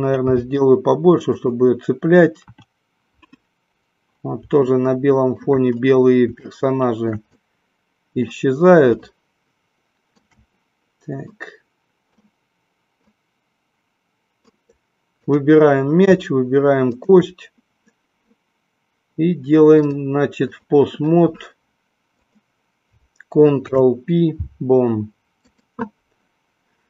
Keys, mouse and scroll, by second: 0.3 g, 2.4 KP_1, 4.6-5.4 middle drag, 6.4-8.4 shift+middle drag, 8.9-10.2 shift+middle drag, 11.4 scroll up 1, 11.7-12.3 middle drag, 13.1-14.4 drag, 15.2 click, 16.9-17.3 shift+drag, 19.7-20.7 drag, 22.1 click, 23.6 ctrl+p.